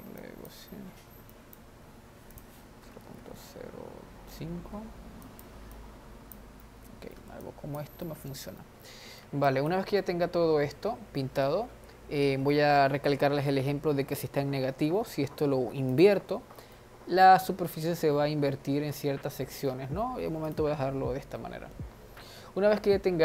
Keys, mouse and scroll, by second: 6.8-8.0 middle drag, 8.0 click, 8.4-10.0 middle drag, 10.0 click, 10.3-13.4 middle drag, 16.2 click, 17.0-20.1 middle drag, 20.9 click, 21.7-23.2 middle drag.